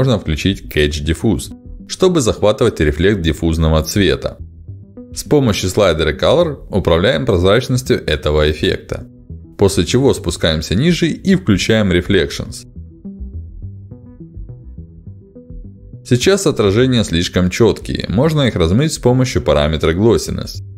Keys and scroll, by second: 11.3 ctrl+alt+d.